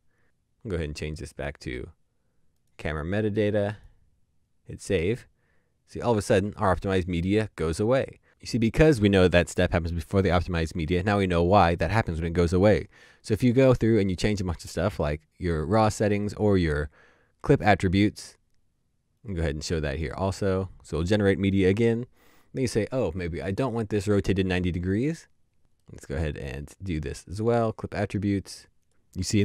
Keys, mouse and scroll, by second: 16.2 right click, 25.8 right click.